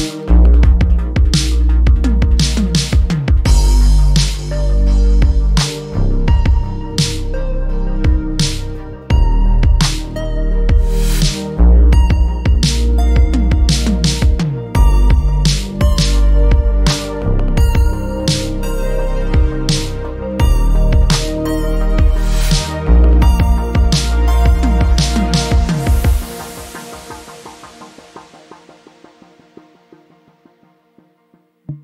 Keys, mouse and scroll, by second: 2.6 click, 3.9 alt+middle click, 7.7 click, 11.3 right click, 12.9 click, 13.6 right click, 14.9 click, 16.4 ctrl+c, 19.3 click, 20.4 alt+middle click, 20.8 click, 22.8 ctrl+v, 23.1 ctrl+Return, 24.4 alt+middle click, 25.5 click, 27.6 alt+middle click, 28.3 click, 29.1 alt+middle click, 30.5 click, 31.2 ctrl+v, 31.4 Return.